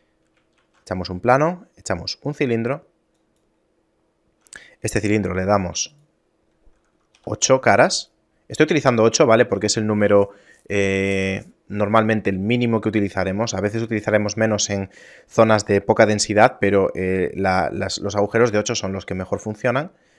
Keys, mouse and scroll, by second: 0.7 shift+a, 5.2 F6.